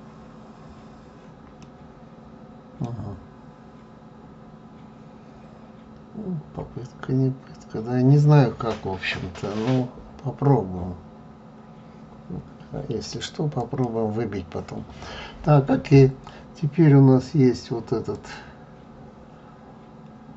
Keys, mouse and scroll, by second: 1.6-4.6 middle drag, 13.5 click, 18.1 click.